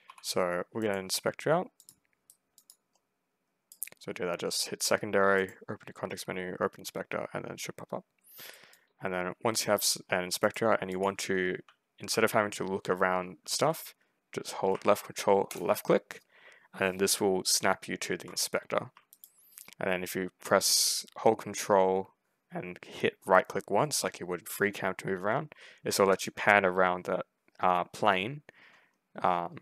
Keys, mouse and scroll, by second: 0.7 middle click, 1.7 click, 2.1-3.6 right drag, 2.4 click, 5.2 middle click, 8.4-9.7 right drag, 8.6 click, 10.9 s, 11.3 w, 12.0 w, 13.3 s, 15.4 ctrl+click, 19.0 ctrl+right click, 25.4 ctrl+scroll down 2, 25.5 ctrl+middle click, 29.5 ctrl+middle click.